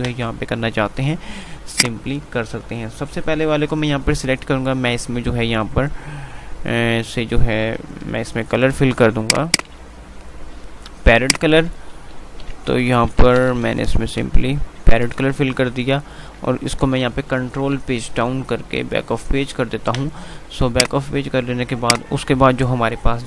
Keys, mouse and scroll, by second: 2.2 click, 9.4 click, 11.3-14.9 typing, 15.2 Return, 17.2 ctrl+Page_Down, 20.8 click.